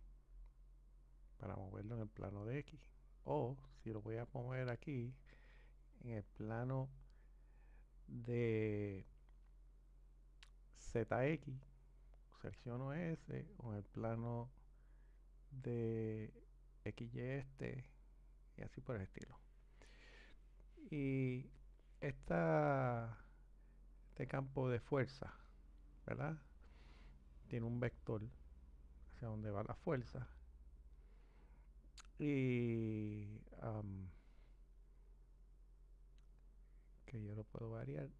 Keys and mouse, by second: 4.9 click, 13.9 click, 24.8 click, 35.9-38.1 drag.